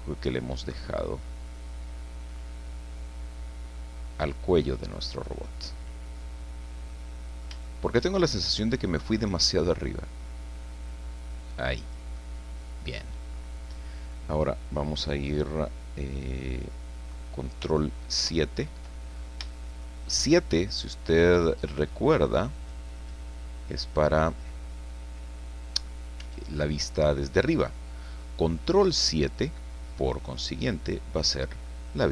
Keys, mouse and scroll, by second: 0.7-1.2 scroll up 1, 2.3-5.4 drag, 5.5 click, 6.3-6.8 scroll down 1, 6.8 middle click, 7.6 shift+middle click, 9.4-12.1 drag, 12.2 middle click, 13.3-13.6 scroll up 1, 18.1 ctrl+KP_7, 19.8-21.4 shift+middle drag, 22.6-24.0 drag, 26.2 s, 29.0 click, 29.9-31.4 drag.